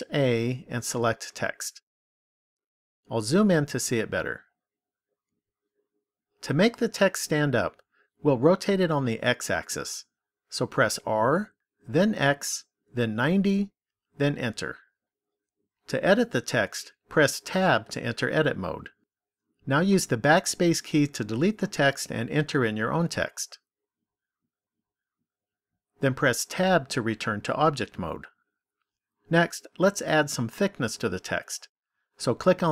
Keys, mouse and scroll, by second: 3.6-7.3 scroll up 6, 10.8 r, 17.4 Tab, 19.4 BackSpace, 19.9 BackSpace, 20.2 BackSpace, 20.6 BackSpace, 22.3-24.0 typing, 26.6 Tab, 32.5 click.